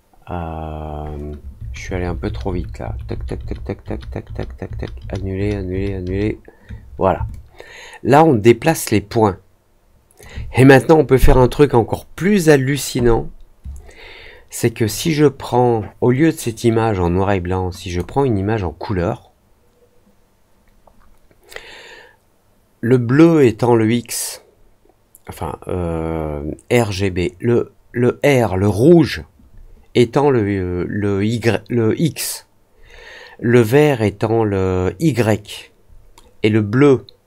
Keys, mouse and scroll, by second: 7.2-10.1 alt+drag, 14.8 click, 17.8 click.